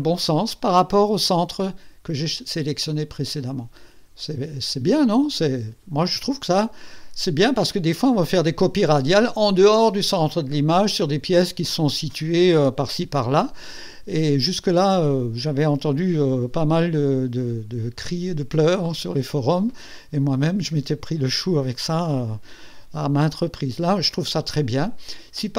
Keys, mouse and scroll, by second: 2.9-6.0 drag, 23.4-25.5 drag.